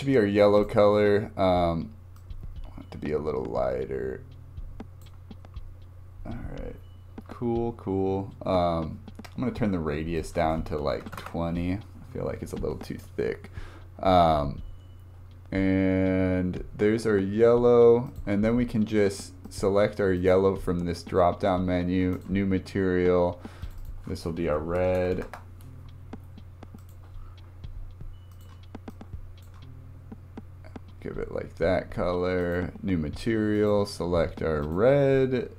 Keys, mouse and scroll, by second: 0.6-2.2 drag, 5.4 scroll up 3, 7.7 scroll down 2, 10.2-31.1 drag, 32.4-35.5 drag.